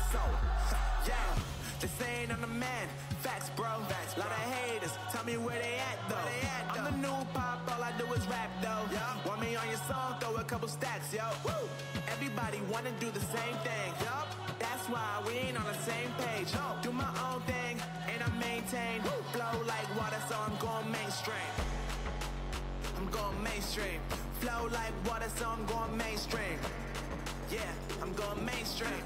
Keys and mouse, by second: 2.3-4.2 drag, 5.1-7.2 middle drag, 7.2 ctrl+r, 13.1 ctrl+r, 15.5 Tab, 16.3 Tab, 18.3 KP_1, 20.9 z, 21.9 z, 22.6 Tab, 24.7 z, 26.3-27.3 drag, 26.6 a, 27.3 c.